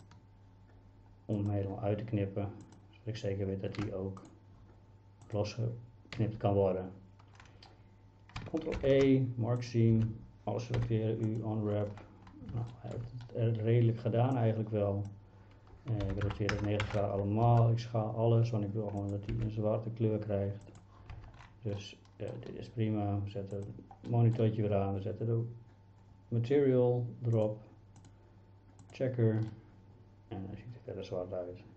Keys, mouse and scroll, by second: 4.2 shift+click, 8.8 ctrl+e, 10.0 a, 10.8 u, 12.8 shift+middle click, 14.4 click, 16.1 r, 16.3 KP_9, 16.6 KP_0, 16.9 KP_Enter, 17.5 s, 19.3 g, 21.2 Tab, 21.8-22.3 middle drag, 23.6 click, 24.1 middle click, 28.0 click, 29.5-31.7 middle drag.